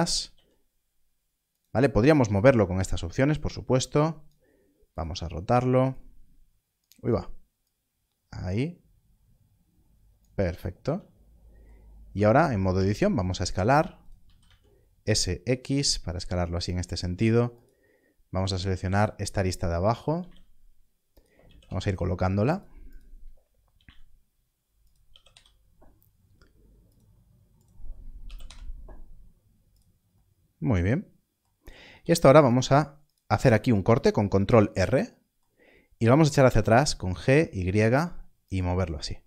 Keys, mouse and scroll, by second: 0.3 z, 1.5 click, 12.0 Tab, 12.7 s, 16.6 x, 19.4 scroll up 1, 20.2 z, 21.1 click, 21.4 g, 21.6 y, 22.5 click, 23.7 g, 23.8 z, 24.8 click, 25.0 g, 25.3 y, 26.9 click, 28.4 y, 31.8 ctrl+r, 36.6 g, 36.7 y, 38.4 click.